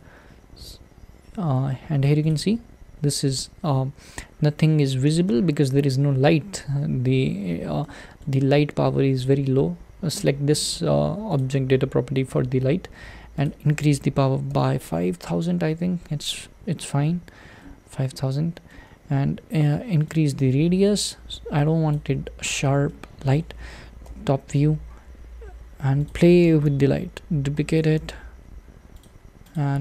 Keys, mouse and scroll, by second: 2.2 click, 3.7-15.3 middle drag, 15.3 0, 17.6-20.2 middle drag, 20.2-22.3 drag, 22.3-22.9 scroll down 3, 22.9-24.1 middle drag, 24.1 `, 24.9 g, 26.7 shift+d, 28.0 shift+d, 29.6 click.